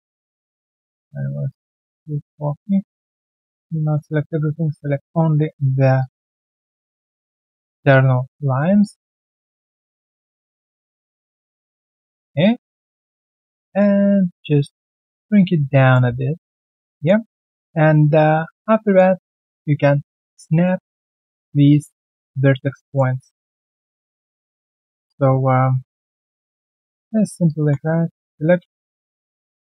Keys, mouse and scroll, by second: 0.5 alt+click, 1.2 ctrl+right click, 2.5 alt+click, 2.8 alt+right click, 3.0 alt+click, 3.7 alt+middle click, 5.9 ctrl+click, 7.0 alt+middle click, 7.8 ctrl+click, 8.8 alt+click, 9.0 alt+middle click, 9.3-9.8 alt+scroll down 1, 9.8 alt+middle click, 10.2 alt+click, 10.9 ctrl+click, 11.9 alt+click, 12.1 alt+middle click, 13.3 alt+middle click, 13.6 alt+right click, 16.9 alt+middle click, 17.2 alt+right click, 17.5 alt+middle click, 17.8 alt+right click, 18.2 right click, 18.8 alt+middle click, 19.0 alt+right click, 19.3 alt+click, 20.6 alt+middle click, 21.7 alt+middle click, 22.7 q, 24.4 alt+scroll down 1, 24.7 alt+middle click, 26.2 alt+middle click, 26.5 alt+right click, 26.8 alt+middle click, 28.1 middle click, 28.3-28.8 typing, 29.3 middle click.